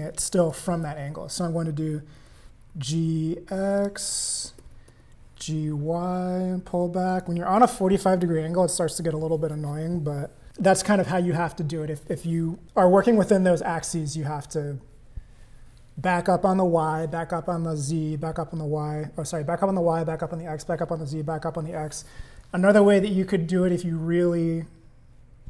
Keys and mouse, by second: 2.2 g, 4.9 g.